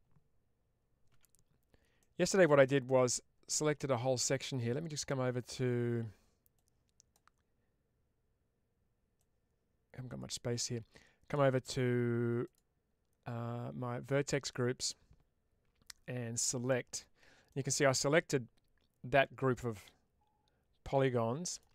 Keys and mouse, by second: 1.0 Tab, 1.9 middle click, 2.5 shift+middle click, 6.4 click, 9.1-11.2 drag, 12.3 click, 16.3 click, 17.4-21.5 middle drag.